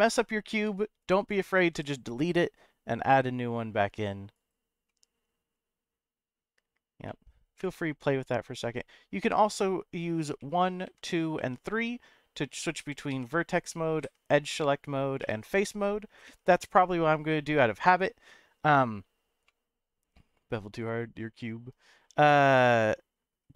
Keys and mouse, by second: 0.5 1, 1.1 click, 1.7 g, 4.3 right click, 4.9-6.3 middle drag, 7.0 middle click, 7.6 middle click, 10.4 1, 10.8 2, 11.4 3, 13.1 1, 14.0 2, 15.2 3, 16.3 1, 19.4-20.5 middle drag.